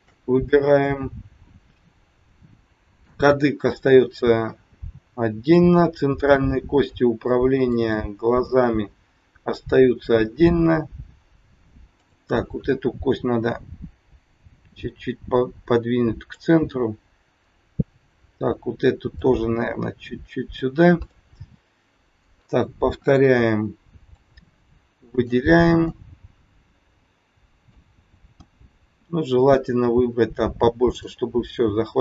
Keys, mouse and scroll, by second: 0.4 middle click, 4.6 middle click, 6.2 middle click, 11.8 click, 14.3 click, 17.9 click, 19.1 click, 21.1 middle click, 23.1 KP_1, 24.2 click, 25.8 middle click, 28.3 KP_1, 29.3 click, 31.6-32.0 scroll up 4.